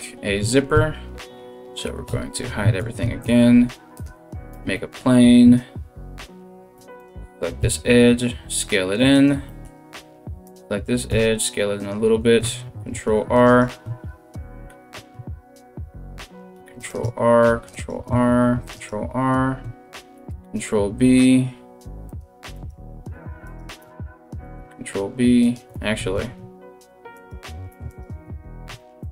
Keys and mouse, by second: 0.3 a, 1.7 h, 2.6 shift+a, 4.1 Tab, 6.4 2, 6.6 middle click, 6.6 right click, 7.2 s, 9.0-10.1 middle drag, 10.1 right click, 10.2-26.7 middle drag, 10.7 s, 12.3 ctrl+r, 16.2 ctrl+r, 17.3 ctrl+r, 18.4 ctrl+r, 19.8 ctrl+b, 22.1 right click, 23.0 alt+shift+right click, 24.0 ctrl+b, 25.3 ctrl+z, 26.0 ctrl+z, 26.7 click, 26.9 shift+middle click, 27.5 right click, 27.6-28.6 middle drag, 28.3 3, 28.6 right click, 28.7 ctrl+middle click.